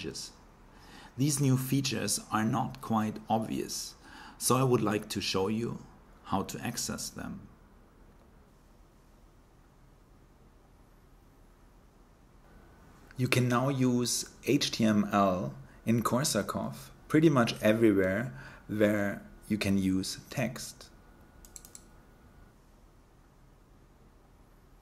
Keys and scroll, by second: 0.0-2.0 typing, 7.5 Left, 7.9 Left, 8.1 Left, 8.2 Left, 8.3 Left, 8.4 Left, 8.5 Left, 8.6 Left, 8.7 Left, 9.0 Left, 9.1 Left, 12.1 typing, 13.6-14.4 typing, 15.8 Right, 15.9 Right, 16.0-16.9 typing, 19.1-21.0 typing, 22.5 typing.